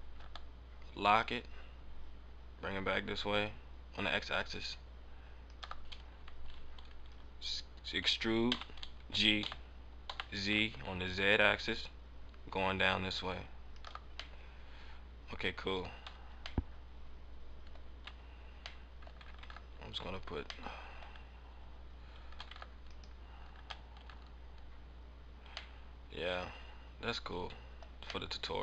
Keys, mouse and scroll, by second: 5.5 ctrl+click, 5.6 ctrl+click, 8.4 e, 13.7 ctrl+click, 13.8 ctrl+click, 14.3 middle click, 15.8 middle click, 15.9 scroll up 1, 16.0 Tab, 16.2 scroll down 1, 16.5 middle click, 18.0 Tab, 18.6 Tab, 18.8 middle click, 19.0 scroll down 1, 19.7 ctrl+Tab, 20.4 scroll up 1, 20.6 middle click, 22.4 ctrl+Tab, 23.9 ctrl+Tab, 25.6 middle click, 27.8 scroll up 1, 27.9-28.2 scroll down 1, 28.2 middle click.